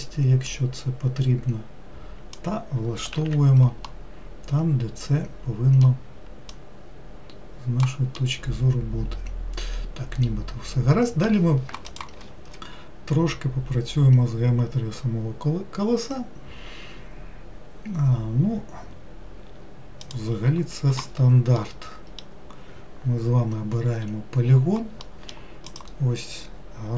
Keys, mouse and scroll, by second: 0.6 click, 3.2 alt+z, 3.9-6.5 middle drag, 6.5 click, 8.2-11.3 middle drag, 21.7-24.8 middle drag, 25.1 middle click, 25.8 click.